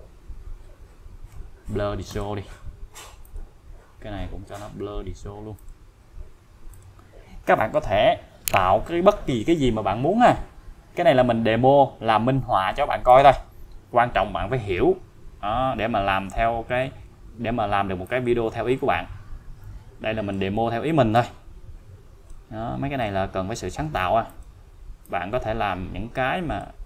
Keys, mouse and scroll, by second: 0.0 scroll up 1, 0.6-1.1 scroll down 1, 2.1 click, 3.2 click, 5.6 click, 6.0-6.7 scroll down 1, 6.7 click, 13.1 click, 18.0-20.6 click, 24.3 click.